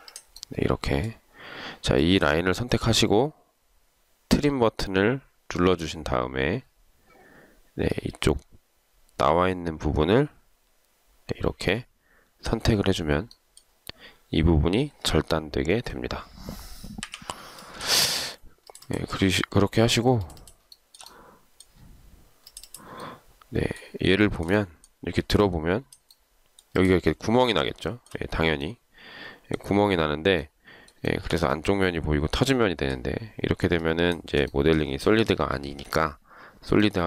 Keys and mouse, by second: 15.7 Escape, 17.2 Delete, 20.9 shift+right click, 24.4 shift+right click, 28.1 shift+right click, 31.3 shift+right click, 34.7 shift+right click.